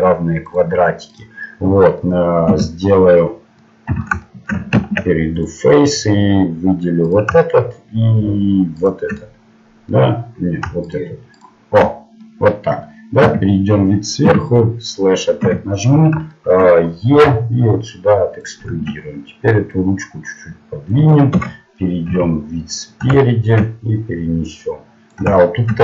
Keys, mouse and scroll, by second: 1.4-2.5 middle drag, 2.5 KP_Divide, 3.9 z, 5.6 ctrl+Tab, 7.1-9.1 right drag, 8.3 click, 8.7 click, 11.0 right click, 12.4 middle click, 13.2 KP_7, 14.2 KP_Divide, 15.4 KP_7, 17.2 e, 18.7 Tab, 19.7 click, 22.1 KP_1, 24.4 click.